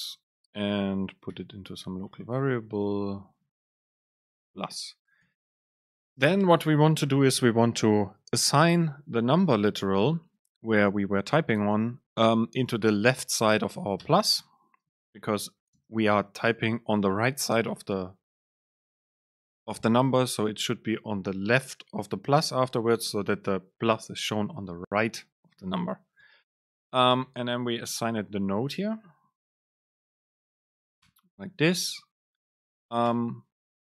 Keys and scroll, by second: 0.3 End, 0.5 Left, 1.5 alt+super+v, 3.2 BackSpace, 4.6 Down, 5.0 Left, 6.3 super+space, 26.3 BackSpace, 30.3 super+space, 31.8 End, 32.5 Down, 33.1 BackSpace.